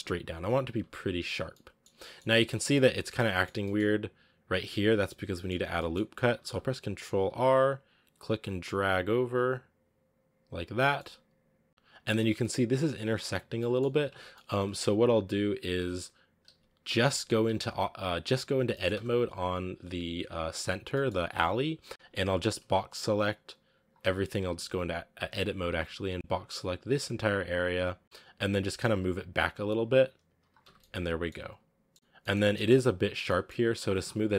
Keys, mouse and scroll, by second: 0.0-0.9 typing, 1.4 middle click, 1.7 scroll down 2, 1.8-3.8 middle drag, 3.8-5.0 scroll up 1, 5.0 scroll down 1, 5.2-6.2 middle drag, 6.2 ctrl+r, 7.0 scroll down 1, 7.1 ctrl+r, 10.6 scroll up 1, 10.8 middle click, 11.7 scroll up 4, 12.2-13.3 shift+middle drag, 13.3 scroll down 4, 13.4 middle click, 13.8 scroll up 1, 13.9 Tab, 14.2 middle click, 15.1-15.7 scroll down 1, 15.8 z, 16.4 z, 16.8 Tab, 17.0-17.3 scroll down 3, 17.3 g, 18.6 middle click, 18.8 Tab, 19.7 a, 20.0 a, 20.8 middle click, 21.2 a, 21.5 a, 23.7 b, 24.1 z, 24.3 a, 27.1 b, 27.6 z, 27.9-28.4 scroll up 4, 28.4 g, 30.5 Tab, 30.6 scroll down 1, 30.6-31.6 middle drag, 31.6 scroll up 2, 31.7-33.0 middle drag, 33.0 scroll up 1, 33.1 middle click, 33.8 Tab, 34.1 scroll down 3.